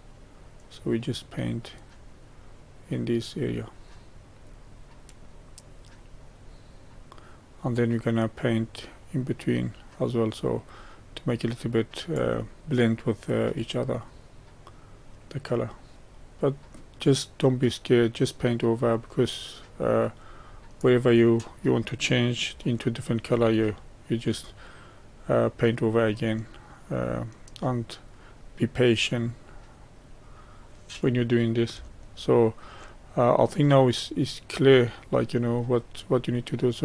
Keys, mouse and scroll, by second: 12.6 middle click, 13.2-15.9 drag, 21.2-22.0 scroll down 1, 22.0-22.6 scroll down 1, 22.6-24.4 shift+middle drag, 24.4-27.5 drag, 32.0-33.0 shift+middle drag, 33.0-36.1 drag.